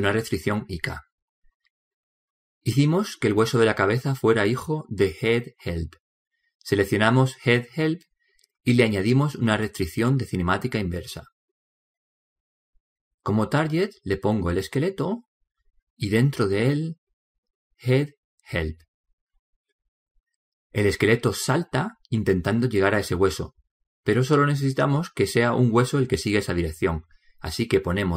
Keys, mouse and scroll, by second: 0.0 middle click, 2.5 middle click, 2.8-4.3 middle drag, 5.8-8.2 right drag, 9.2-12.0 drag, 13.9 click, 27.5 click.